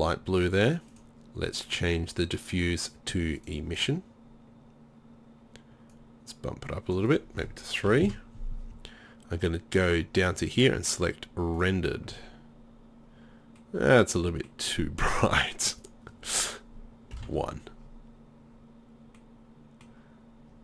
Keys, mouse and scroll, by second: 14.3 middle click, 14.4 middle click, 15.3 middle click, 16.1-18.5 drag.